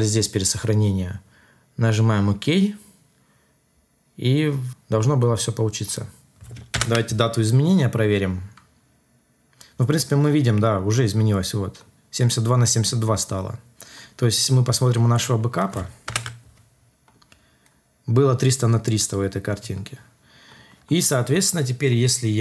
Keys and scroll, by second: 6.7 Return, 16.0 Return.